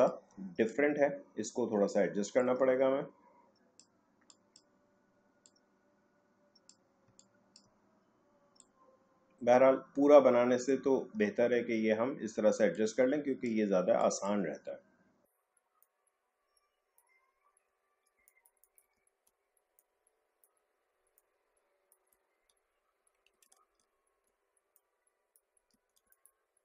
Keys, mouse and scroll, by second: 0.7-4.3 drag, 7.1 space, 7.2 click, 7.6 space, 8.6-11.1 drag, 11.1 space, 12.7 click, 15.8-18.0 drag, 18.0 alt+scroll down 1, 18.1 space, 18.2 click, 18.4 space, 18.6 click, 18.7 space, 19.2-19.7 alt+scroll up 1, 19.7-23.4 drag, 23.4 ctrl+z, 23.9-24.2 alt+scroll up 1, 24.7-25.9 drag, 25.9 alt+scroll down 1, 26.0 space, 26.1-26.6 drag.